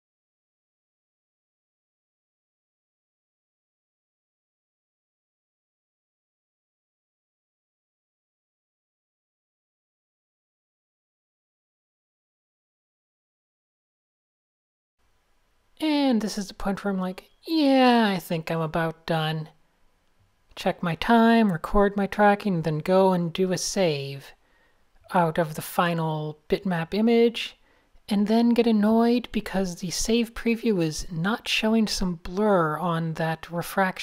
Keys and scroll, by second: 1.5 Tab, 2.6 Tab, 2.9 super+space, 3.1 n, 5.2 super+z, 5.6 Tab, 8.8 super+0, 10.5 Tab, 13.2 super+space, 13.3 super+space, 13.4 super+space, 13.6 a, 15.0 shift+super+a, 15.1 super+0, 15.2 Tab, 17.4 super+s, 19.3 Tab, 20.6 a, 21.1 Tab, 21.3 super+space, 21.6 n, 26.4 super+0, 27.6 alt+shift+super+s, 33.8 Tab.